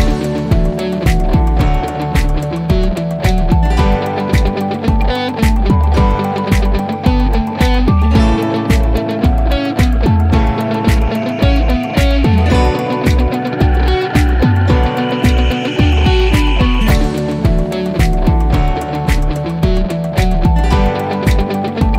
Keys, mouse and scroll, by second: 1.3 click, 2.0-3.5 scroll down 1, 5.3 click, 6.7-7.1 scroll down 1, 11.3 click, 15.3 click, 18.1 click.